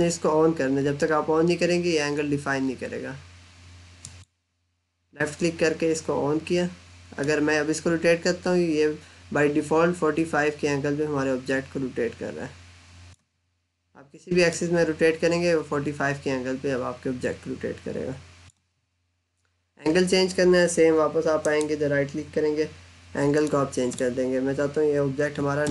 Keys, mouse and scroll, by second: 3.6 click, 7.1 click, 21.2 right click, 23.3 click, 25.5 9.